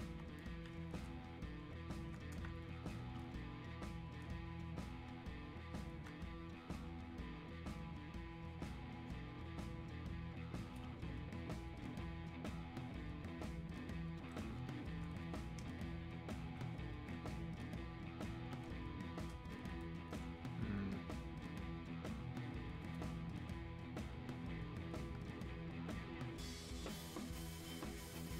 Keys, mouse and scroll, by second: 11.8 click, 23.9 shift+click.